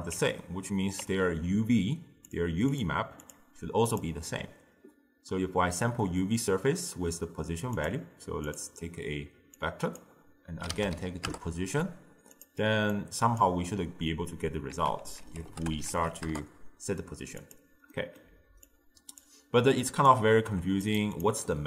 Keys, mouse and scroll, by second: 0.2 Tab, 1.1 Tab, 2.3-2.9 drag, 3.3-6.9 drag, 7.8-9.7 drag, 13.0 click, 14.8 ctrl+a, 18.0-18.7 middle drag, 18.7 click, 19.8 click, 20.6 g, 21.2 drag.